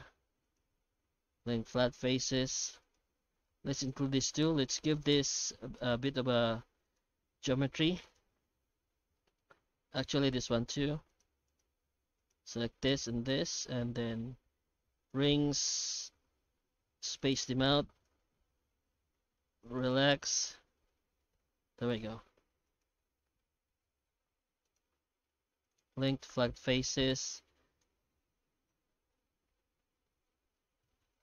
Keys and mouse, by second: 0.4 right click, 0.8 q, 1.8 Tab, 2.1 Tab, 2.8 shift+right click, 3.7 ctrl+r, 5.4 q, 6.8 right click, 7.7 3, 8.0 right click, 9.2 middle click, 9.9 ctrl+r, 11.5 right click, 12.2 ctrl+right click, 12.7 q, 15.5 q, 17.7 q, 20.6 alt+a, 21.2 middle click, 22.4 3, 22.6 right click, 23.2 q, 24.6 shift+right click, 24.9 q, 26.2 Tab, 26.5 middle click, 26.7 shift+q.